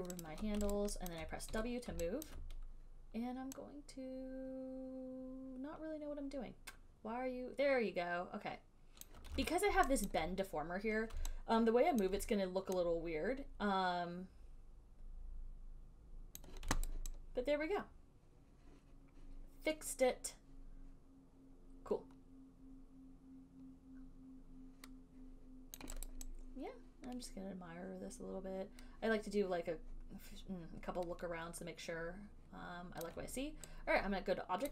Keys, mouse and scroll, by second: 0.5 shift+click, 1.0 alt+right click, 1.4 alt+click, 1.8 w, 9.2 click, 9.5 ctrl+z, 12.2 click, 16.6 click, 17.1 alt+right click, 26.1 alt+click, 26.3 alt+right click, 33.3 alt+click.